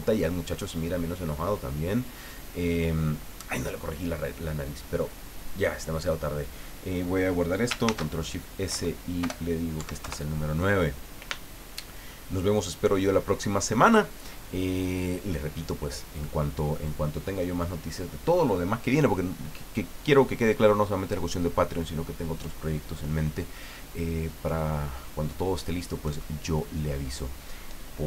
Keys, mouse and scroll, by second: 7.8 ctrl+shift+s, 8.7 Right, 9.2 BackSpace, 9.9 KP_9, 10.0 KP_Enter.